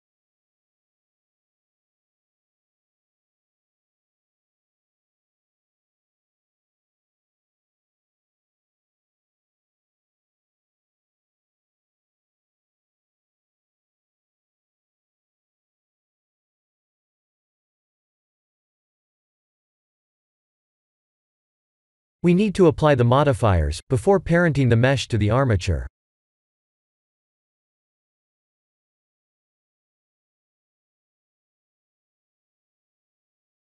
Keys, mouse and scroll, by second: 0.6 shift+z, 1.1 middle click, 2.8 middle click, 3.1-4.1 scroll down 2, 3.6 middle click, 4.1 middle click, 4.2 Tab, 6.4 Tab, 6.8 ctrl+3, 7.5 Tab, 7.9-8.4 scroll down 4, 8.4 Tab, 8.8 middle click, 10.4 KP_1, 11.5 click, 12.2 shift+z, 12.9 middle click, 13.5 middle click, 13.7 a, 14.3 middle click, 15.1 middle click, 18.3 scroll up 1, 18.3 scroll down 1, 18.6 Tab, 19.3 Tab, 22.8 ctrl+a, 23.9 ctrl+z, 27.0 click, 27.8 click, 28.6 click, 29.2 ctrl+a, 32.5 ctrl+a.